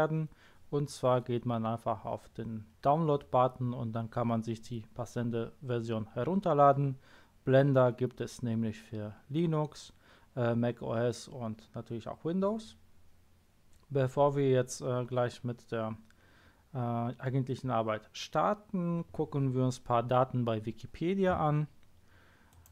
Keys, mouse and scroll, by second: 22.5 click.